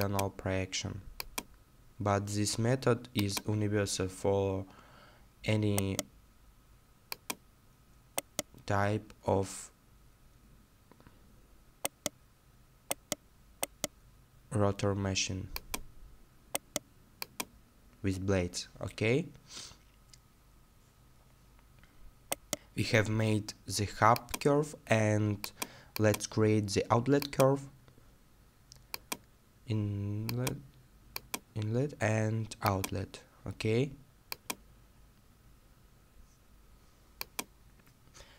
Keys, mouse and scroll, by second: 3.8 right click, 3.8-4.4 scroll down 1, 5.8 right click, 8.2-8.9 scroll down 1, 9.3 scroll down 1, 11.9 right click, 16.6 right click, 17.7-18.7 scroll down 1, 21.2 middle click, 22.3 right click, 35.0 middle click.